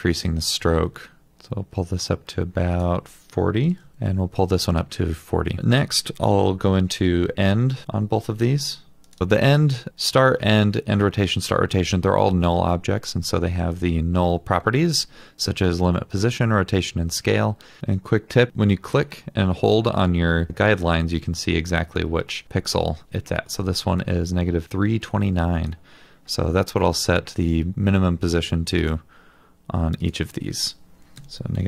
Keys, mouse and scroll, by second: 3.5-4.2 typing, 3.9 double click, 7.7 alt+l, 7.8 alt+double click, 31.2-31.6 typing.